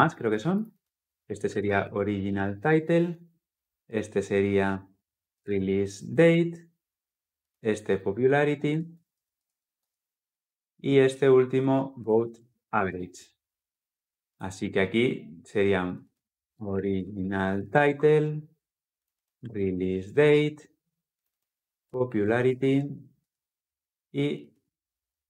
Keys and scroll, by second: 2.4 Return, 17.7 Return.